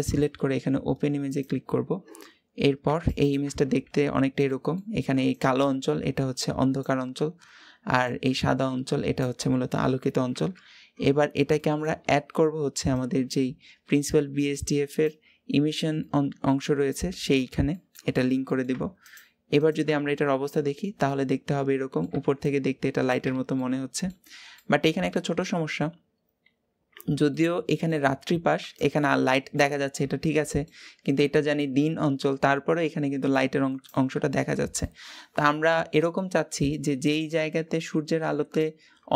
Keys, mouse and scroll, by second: 2.9 ctrl+shift+click, 3.8-4.3 scroll up 2, 4.3-14.8 middle drag, 14.8-19.5 drag, 20.9-24.1 middle drag, 24.1 scroll up 1, 24.4 middle click, 25.3-27.2 scroll down 2, 27.2-30.6 middle drag, 30.6-34.3 scroll up 1, 34.3 scroll down 2, 34.6-35.6 middle drag, 35.6-36.0 scroll up 1, 36.0-36.8 middle drag, 36.8-37.1 scroll up 1, 37.1-39.1 middle drag.